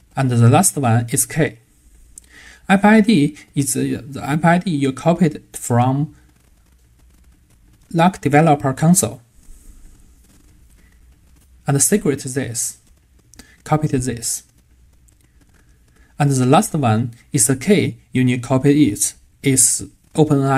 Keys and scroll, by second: 4.4 super+c, 5.6 super+v, 12.5 super+c, 13.2 super+v.